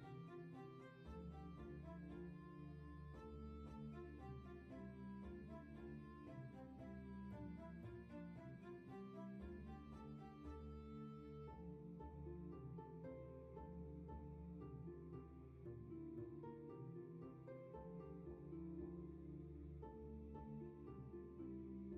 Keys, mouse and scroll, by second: 2.6 ctrl+z, 6.9 scroll down 1, 7.6 space, 8.1 scroll down 1, 9.7-10.3 scroll up 2, 15.6 scroll down 1, 16.4-18.1 scroll down 1, 18.1 scroll up 1, 20.2 ctrl+z.